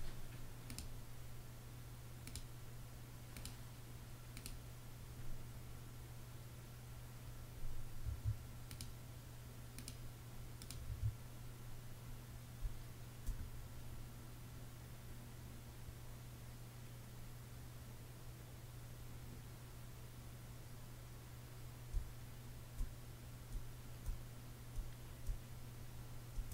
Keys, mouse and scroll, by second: 7.5 Escape, 10.4 Escape, 12.1 space, 21.4 space, 23.0 space, 24.2 space, 26.2 space.